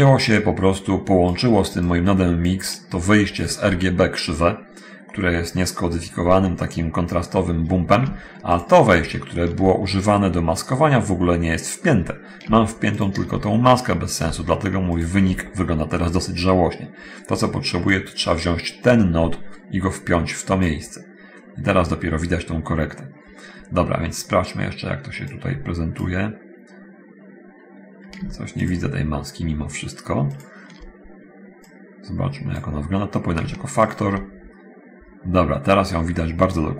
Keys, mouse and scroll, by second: 0.5-1.7 drag, 2.1-2.7 drag, 3.6 ctrl+shift+click, 8.7 ctrl+shift+click, 12.8 ctrl+shift+click, 15.1 ctrl+shift+click, 18.1-21.0 drag, 25.5 click, 28.9 ctrl+shift+click, 30.5 ctrl+shift+click, 31.9-32.9 drag, 33.8 ctrl+shift+click.